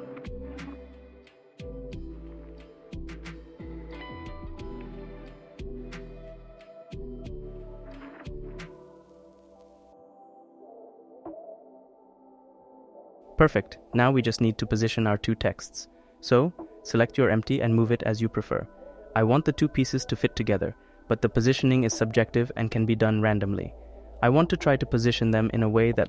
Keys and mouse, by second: 0.2 click, 1.0-2.2 drag, 2.7 click, 3.6-4.7 drag, 4.9-6.5 drag, 8.0 click, 10.2-11.3 drag, 12.4 click, 13.3 click, 13.3 middle click, 14.2 click, 14.7 middle click, 15.1 click, 15.2 middle click, 15.3 click, 15.5-17.9 drag, 18.3 click, 19.1 click, 19.9 click, 20.5 click, 21.1 click, 21.5 click, 21.6 click, 22.7 click, 23.1 click, 24.4 click, 25.1 click, 25.8 click.